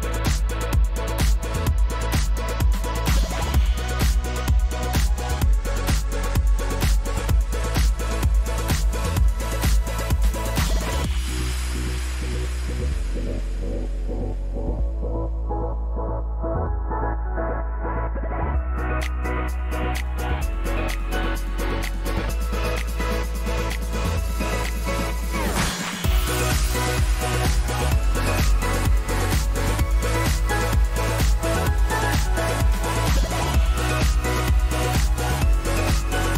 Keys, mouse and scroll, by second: 0.5 click, 0.8 ctrl+v, 2.8 shift+click, 4.5-5.1 drag, 6.1 click, 6.9 click, 9.0-10.0 drag, 10.7-11.0 Up, 11.9 Up, 11.9 Down, 13.6 Up, 15.9 Down, 16.3 Down, 17.0 click, 17.7 Up, 18.6 Up, 18.6 Left, 18.8 Left, 19.1 Left, 20.0 Left, 20.6-21.3 drag, 21.5 middle click, 21.8-22.8 drag, 23.6 click, 24.4 click, 24.6 ctrl+c, 24.9 ctrl+v, 26.8 click, 28.8 click, 29.7 click, 30.6 ctrl+a, 31.1 click, 32.9 click, 34.2-36.3 drag.